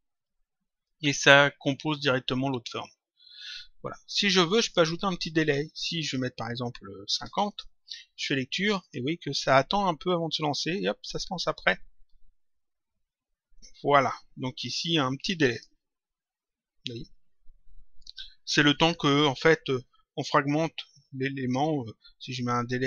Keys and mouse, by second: 4.0 click, 5.8 click, 7.4 click, 8.8 click, 15.4 click, 22.2 click.